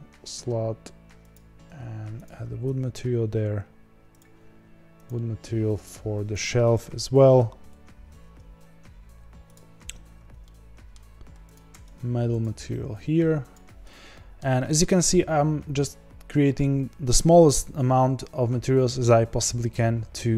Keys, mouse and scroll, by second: 2.6 Tab, 3.0-4.1 scroll down 4, 4.1 click, 6.4-8.5 drag, 8.5 ctrl+s, 9.5 click, 10.4-11.5 middle drag, 11.5 click, 13.5-14.1 drag, 14.1-20.3 shift+middle drag.